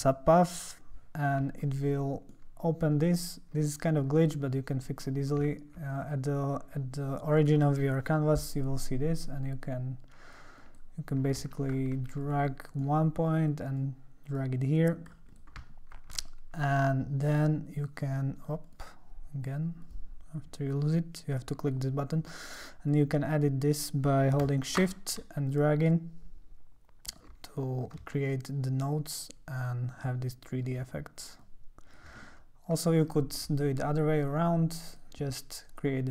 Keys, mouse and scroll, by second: 0.5 click, 1.6-4.3 alt+middle drag, 5.6 alt+middle click, 5.7 alt+scroll up 2, 9.2-10.7 drag, 11.6 alt+scroll, 11.7 alt+scroll down 1, 12.1 ctrl+scroll, 12.5-13.8 ctrl+middle drag, 13.8-15.1 drag, 15.3 click, 16.2 ctrl+alt+middle click, 16.4-17.0 ctrl+scroll, 17.2 click, 17.8 click, 18.0 click, 18.6 click, 19.8 click, 21.6 click, 22.9 click, 25.5-27.1 shift+drag, 28.1-30.6 shift+drag, 31.4 shift+click, 32.4 middle click, 32.5-32.8 scroll down 2, 34.4 click, 34.9 click.